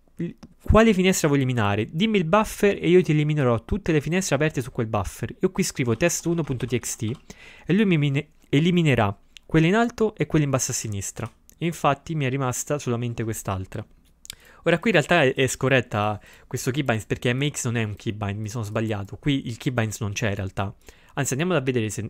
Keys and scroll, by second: 5.7-7.6 typing.